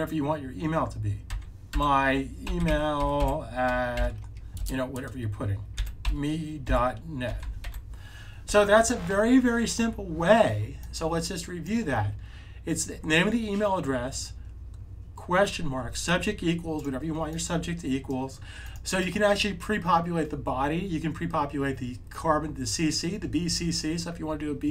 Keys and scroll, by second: 1.2-4.5 typing, 5.6-7.6 typing.